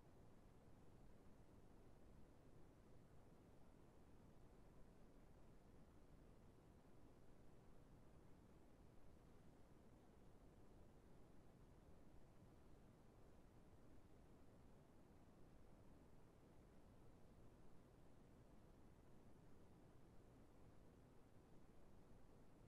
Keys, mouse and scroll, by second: 12.8 middle click, 16.5 middle click.